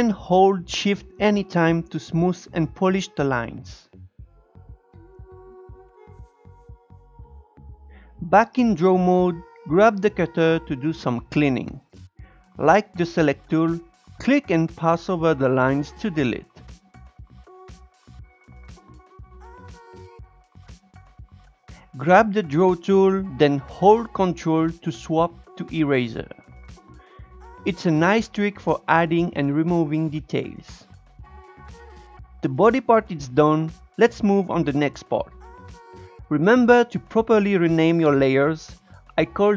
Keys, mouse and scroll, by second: 3.4 Tab, 4.0 Tab, 4.2 click, 5.5-6.9 drag, 6.9 shift+middle click, 7.0-7.4 scroll up 2, 7.4 Tab, 8.7-14.4 drag, 14.4-15.4 shift+middle drag, 15.4-16.7 drag, 16.8-18.3 drag, 18.6 click, 19.7 scroll up 2, 19.9-21.6 drag, 21.7-22.7 scroll up 4, 21.9 click, 22.7 shift+middle click, 22.9-24.3 scroll up 1, 24.3-26.1 ctrl+drag, 26.1 shift+middle click, 26.6-27.8 ctrl+drag, 27.8-28.4 scroll down 7, 28.4-31.3 shift+middle drag, 31.3 click.